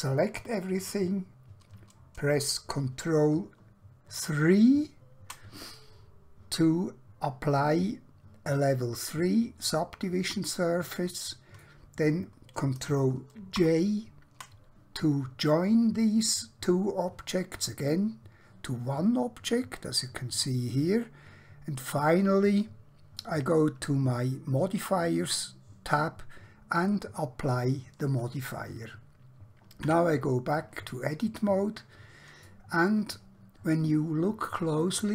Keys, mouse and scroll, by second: 2.6 ctrl+Num_Lock, 4.3 3, 7.5 middle click, 13.6 ctrl+j, 23.2 click, 26.8 click, 29.9 Tab, 31.2 middle click, 33.2-33.8 scroll up 1, 34.9 shift+middle click.